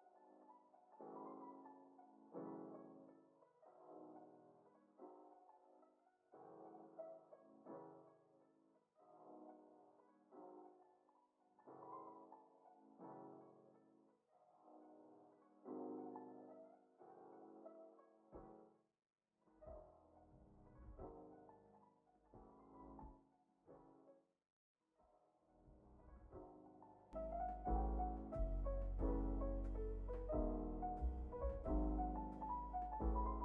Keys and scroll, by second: 0.3 ctrl+c, 2.3 ctrl+c, 3.6 ctrl+c, 4.8 ctrl+c, 6.1 ctrl+c, 7.3 ctrl+c, 8.6 ctrl+c, 10.4 x, 12.6 ctrl+c, 14.0 ctrl+c, 14.0 ctrl+v, 15.2 ctrl+c, 16.5 ctrl+c, 17.7 ctrl+c, 19.0 ctrl+c, 20.4 ctrl+c, 21.8 ctrl+c, 23.2 ctrl+c, 24.0 ctrl+s, 25.0 a, 28.9 space.